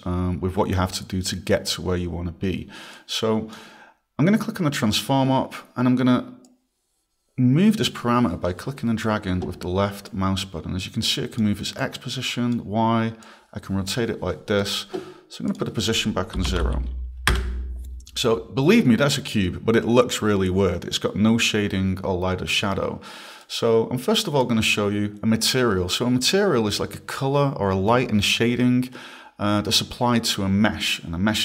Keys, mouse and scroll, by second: 3.0 click, 6.5 click, 10.1 click, 11.8 click, 13.2 click, 15.5 click, 16.4 0, 16.5 Tab, 16.6 0, 17.3 Return, 23.4 click, 30.9 click.